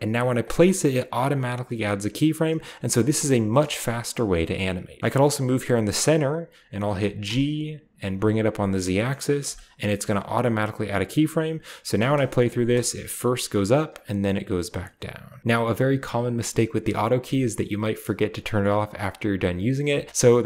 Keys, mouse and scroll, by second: 0.0 g, 0.2 click, 2.2-3.3 drag, 3.8 space, 4.8 space, 5.0 click, 7.1 g, 7.9 z, 9.2 click, 10.9-11.9 drag, 11.8 space, 12.5-13.5 drag, 13.7-15.4 drag.